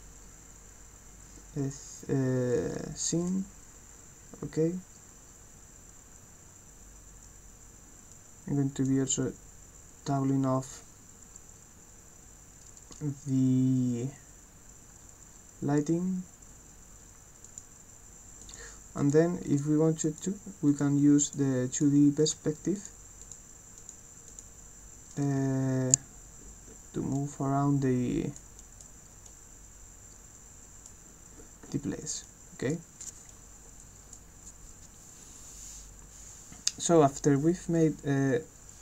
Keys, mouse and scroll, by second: 2.7 right click, 2.9 a, 8.1 click, 17.5 click, 18.4 click, 19.1 click, 19.5 click, 20.1 click, 20.7 click, 21.3 click, 21.8 click, 22.3 click, 22.8 click, 23.3 click, 23.8 click, 24.3 click, 25.2 right click, 25.4 w, 26.1-27.0 scroll up 8, 27.1-28.3 right drag, 27.6-28.2 scroll up 4, 28.5 right click, 28.9 scroll down 2, 29.3-30.8 right drag, 31.0-31.7 scroll down 6, 32.0 click, 32.2 right click, 33.3 right click, 37.8-38.8 drag.